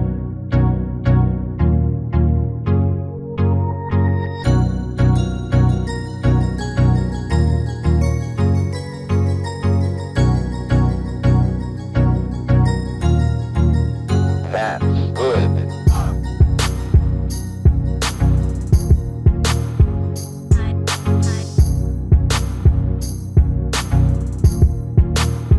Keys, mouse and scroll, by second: 1.0-2.7 middle drag, 3.5 click, 4.1-5.3 drag, 17.6-19.3 drag, 19.3-21.8 middle drag, 21.8-23.7 drag.